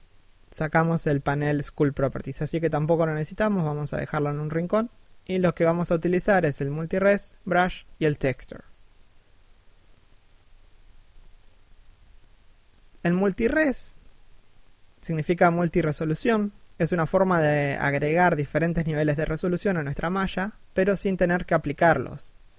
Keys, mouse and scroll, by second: 0.5 n.